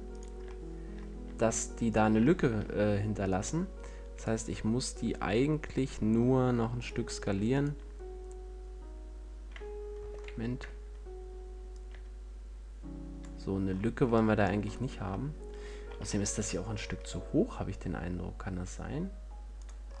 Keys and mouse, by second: 10.4 ctrl+l, 14.4 middle click, 15.5 middle click, 16.2 g.